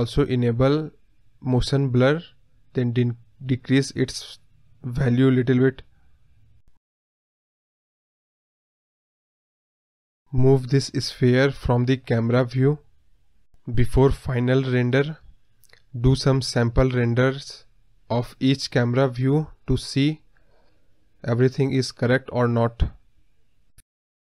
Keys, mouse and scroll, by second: 6.2 click, 6.3-6.6 scroll down 1, 6.6 click, 8.0 scroll up 10, 8.5-10.7 drag, 13.1 drag, 14.0 g, 16.2-19.9 drag, 21.1-22.9 drag.